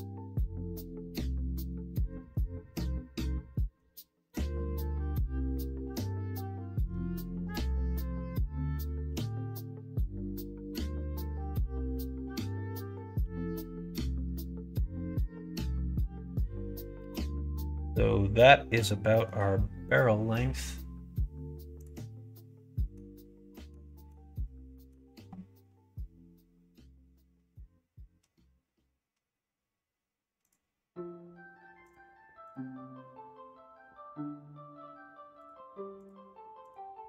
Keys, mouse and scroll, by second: 1.6 middle click, 3.4 middle click, 5.9 middle click, 6.5 middle click, 7.2 s, 12.7 s, 15.4 middle click, 16.2-18.8 middle drag, 19.0 middle click, 22.7 middle click, 23.6 middle click, 23.9 middle click, 24.7 middle click, 30.3 click, 31.8 click, 35.3 click, 35.9 click, 36.7-37.0 drag.